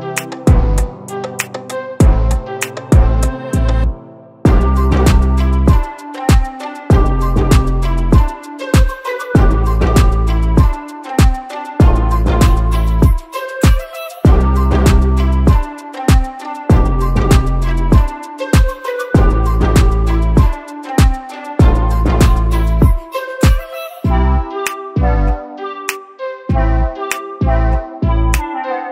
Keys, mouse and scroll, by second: 1.7-2.1 scroll down 2, 2.1-2.8 drag, 3.4 click, 3.8 click, 4.8 click, 6.5 click, 8.2-8.7 scroll down 6, 8.7 click, 10.0 scroll up 2, 10.6 click, 11.2 scroll up 2, 11.9 click, 13.5 click, 14.0 shift+click, 15.5 click, 16.1 shift+click, 16.6 shift+click, 17.1 shift+click, 17.6 shift+click, 18.6 click, 19.9 click, 20.2 click, 21.7 ctrl+z, 22.1 click, 22.9 click, 23.2 click, 24.0 click, 24.4 click, 25.0 click, 26.3 click, 27.4-28.2 scroll up 2, 28.2 click.